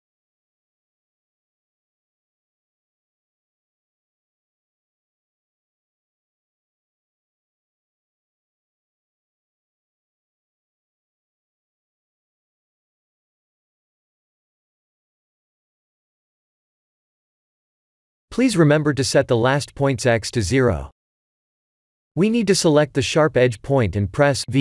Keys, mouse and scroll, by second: 2.0 e, 13.1 e, 15.4 e, 18.5 click, 20.3 Tab, 21.1 Tab, 21.6 click, 22.5 v, 23.1 Tab, 23.6 Tab, 24.1 click.